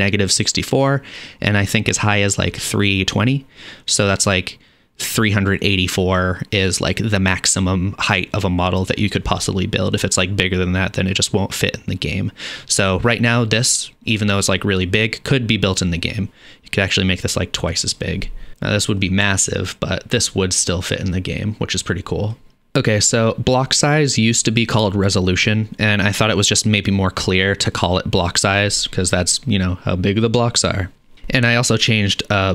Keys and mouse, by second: 18.5 KP_0, 22.7 middle click, 22.9-32.5 drag.